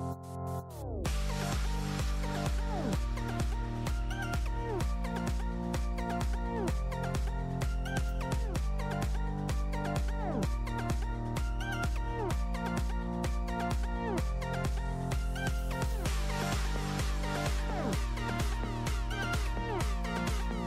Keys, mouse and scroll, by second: 0.6-1.1 middle drag, 1.1 r, 2.7 click, 3.2 s, 3.5-4.0 middle drag, 4.0 click, 4.4 middle drag, 4.6 shift+a, 5.5 alt+g, 5.5 alt+r, 5.9 click, 6.2-8.1 drag, 8.2 click, 8.3-9.6 drag, 9.9 s, 10.4 ctrl+KP_0, 10.8-11.4 drag, 11.4 KP_0, 11.7 click, 12.1 click, 12.3-12.8 scroll down 9, 12.8 click, 13.0 KP_0, 13.4 KP_0, 13.8-15.1 drag, 15.1 space, 15.4 click, 15.9 click, 16.4 click, 17.2-18.2 drag, 18.4 space, 18.9 space, 19.7-20.6 drag.